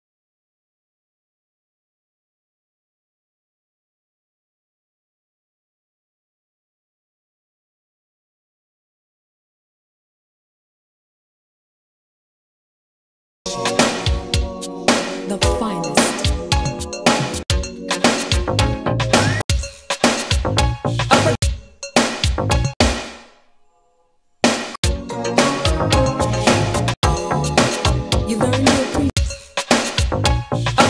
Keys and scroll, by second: 13.4 space, 17.4 4, 19.4 4, 21.3 4, 22.7 4, 24.7 4, 26.9 4, 29.1 4.